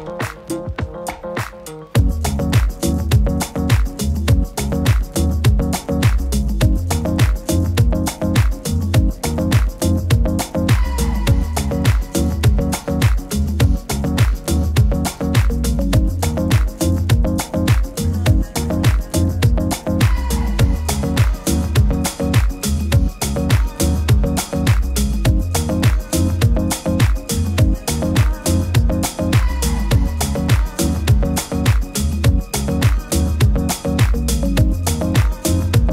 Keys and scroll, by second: 2.7 super+i, 9.6 super+-, 21.5 super+t, 27.9 super+t.